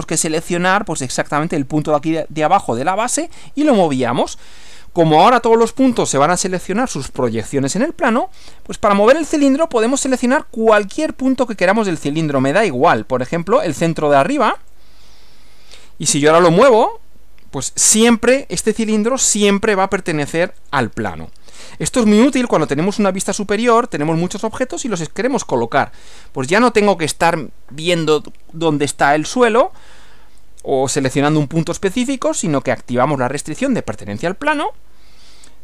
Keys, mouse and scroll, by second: 14.6 click, 20.6 click, 22.4 click.